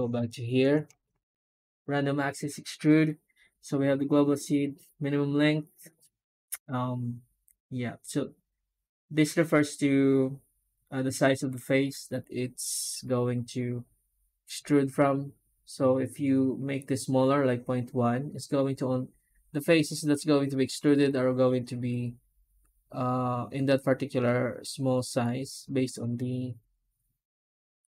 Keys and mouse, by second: 0.1 Tab, 27.8-27.9 drag.